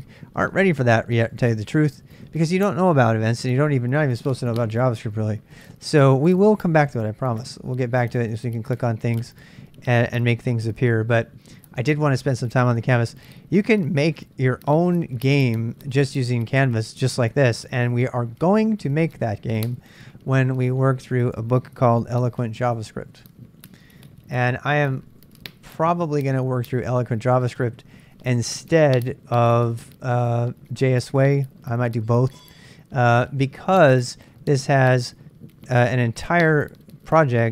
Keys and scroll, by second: 23.0-25.8 typing, 26.0 Return.